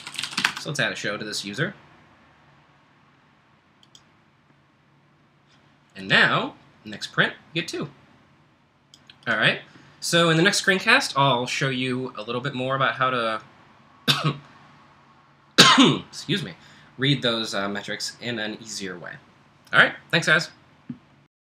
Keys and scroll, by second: 0.0-0.9 typing.